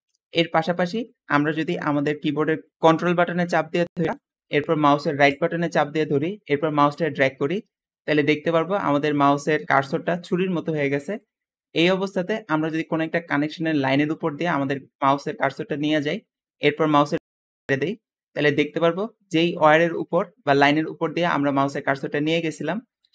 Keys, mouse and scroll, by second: 0.0 Escape, 0.2-0.5 scroll down 2, 5.1-17.6 ctrl+right drag, 18.7 `, 19.9 click, 22.8 click.